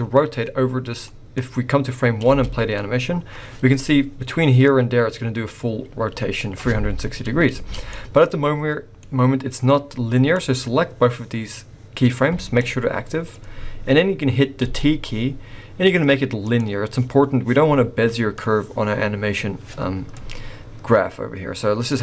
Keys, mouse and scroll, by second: 1.3 click, 2.2 space, 7.5 space, 7.9 middle click, 10.3 click, 14.6 t, 18.4 click.